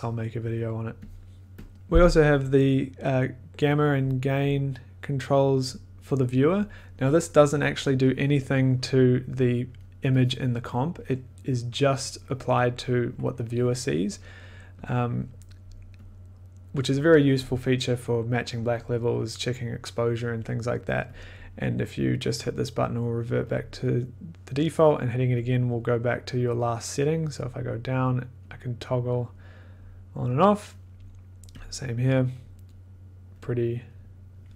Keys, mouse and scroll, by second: 1.2 click, 3.9 click, 5.4 click, 9.9 middle click, 10.4 click, 10.7 click, 15.1 click, 20.3 click, 21.3 click, 22.4 click, 23.5 click, 25.4 click, 25.7 click, 25.7 click, 26.1 click, 26.6 click, 27.4 click, 28.1 click, 28.4 click, 28.9 click, 29.3 click, 29.8 click, 31.6 click, 32.4 click, 32.7 click, 32.7 click, 33.4 click, 33.9 click.